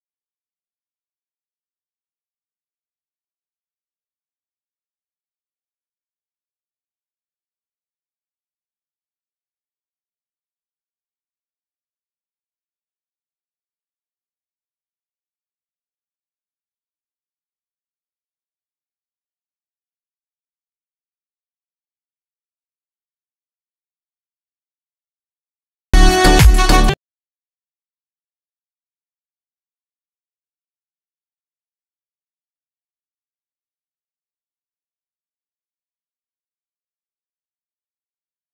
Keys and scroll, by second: 12.5 ctrl+alt+z.